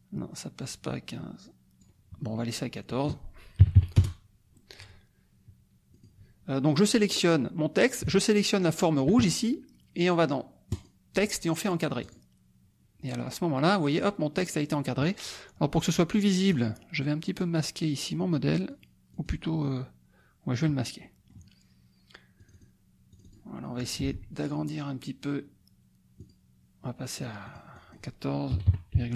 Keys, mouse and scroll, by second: 2.9 click, 3.7 KP_4, 4.0 Return, 5.9 click, 8.2 shift+click, 10.7 click, 12.1 click, 16.5 click, 18.7 click, 20.5 click, 21.0 middle click, 22.4 click, 23.1 click, 24.0 ctrl+a, 26.2 click, 27.4-28.5 drag, 28.5 KP_1, 28.6 KP_4, 28.9 KP_Decimal, 29.1 KP_5.